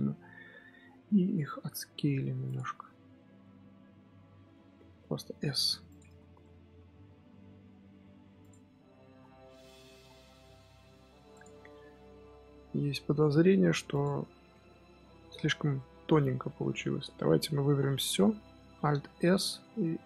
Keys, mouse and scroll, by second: 1.1 s, 2.5 middle click, 3.1 z, 3.3-4.9 middle drag, 4.9 s, 6.0 Tab, 6.1 scroll down 1, 6.3-8.3 middle drag, 8.3 click, 8.5 scroll down 1, 8.6-9.1 middle drag, 9.1 scroll down 7, 9.4-9.9 middle drag, 9.9 scroll up 6, 10.2-10.7 scroll down 1, 10.7-11.2 scroll up 3, 11.2 click, 11.4-12.3 middle drag, 12.3 Tab, 12.4 middle click, 12.7 scroll up 1, 13.0 s, 14.7 scroll down 3, 15.0 middle click, 15.3-15.7 scroll up 2, 15.7 middle click, 16.2 scroll up 2, 16.4-17.6 middle drag, 17.6 a, 18.8 alt+s.